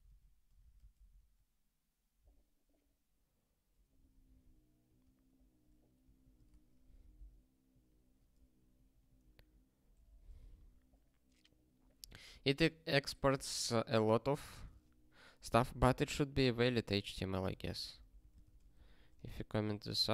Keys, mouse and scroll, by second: 0.6 super+o, 1.2 ctrl+k, 4.8 q.